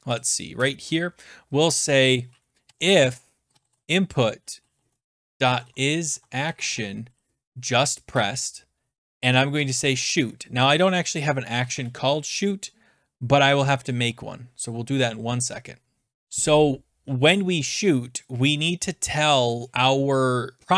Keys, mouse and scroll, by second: 0.2 click, 0.6 Return, 1.9 Return, 2.4-7.1 typing, 4.9 Tab, 8.1 Return, 8.6-11.5 typing, 11.7 Return, 13.8 :, 19.7 scroll down 2.